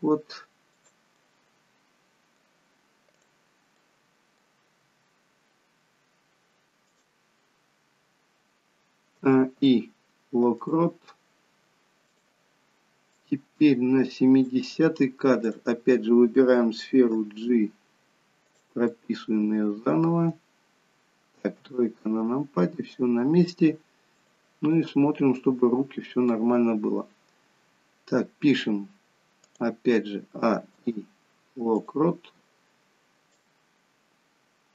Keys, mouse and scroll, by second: 1.0 middle click, 3.0 click, 3.7 middle click, 4.8 g, 9.0 a, 9.5 i, 12.0 click, 13.1 click, 15.4 click, 17.1 g, 18.8 middle click, 21.5 KP_3, 24.2 click, 24.8 middle click, 29.3 click, 30.3 a, 30.6 i, 33.3 click.